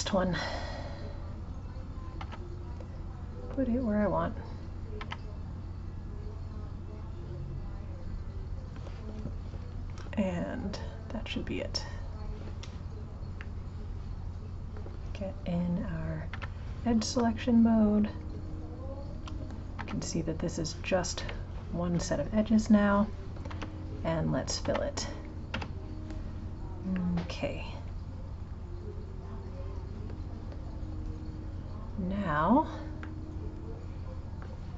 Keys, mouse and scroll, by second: 0.9 click, 4.1 click, 12.1-13.4 drag, 13.4-16.3 middle drag, 16.3 2, 17.4 shift+click, 18.2 shift+click, 19.7 g, 24.6 g, 26.9-29.9 middle drag, 32.3 click, 33.1 shift+middle click, 33.4-34.7 scroll down 6.